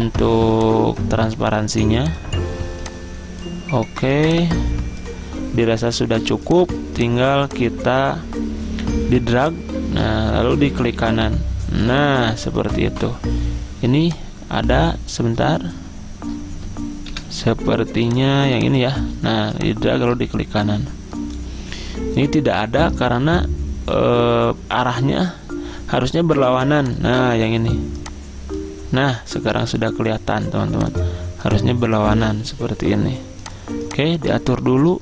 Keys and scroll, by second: 17.2 Delete, 19.2 ctrl+z.